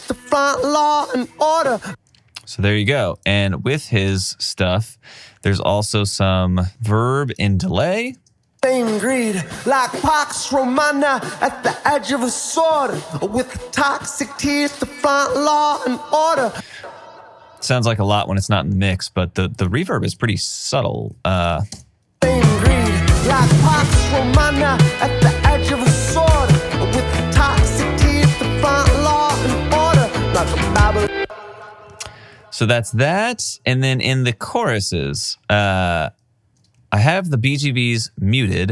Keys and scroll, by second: 1.7 space, 3.1 alt+space, 8.2 alt+shift+space, 16.5 space, 21.8 alt+shift+space, 30.9 space.